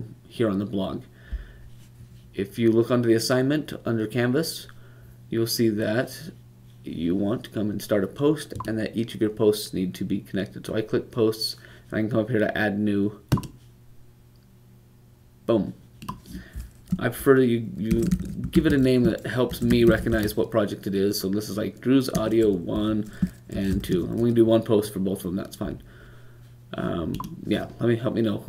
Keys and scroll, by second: 17.5-18.6 typing, 19.7 typing, 22.0 typing, 25.0 typing.